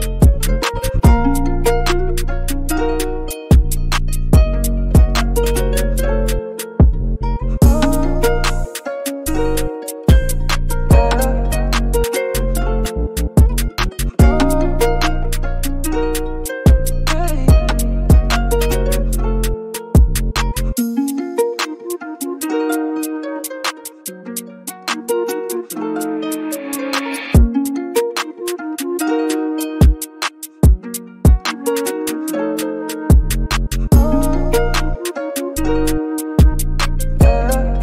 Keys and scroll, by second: 10.9 super+g, 11.1-12.2 typing, 12.3 super+t, 15.5 super+t, 16.0 super+t, 19.6 super+t, 23.4 super+t, 23.8 super+t, 25.5 super+t, 30.9-31.8 typing, 34.6 super+t, 34.8 scroll down 1, 35.0 Page_Down, 35.0 Page_Down, 35.2 Page_Down, 35.6 Page_Down, 35.6 Page_Down, 35.9 Page_Down, 36.1 scroll down 3, 36.3 Page_Down, 36.3 Page_Down.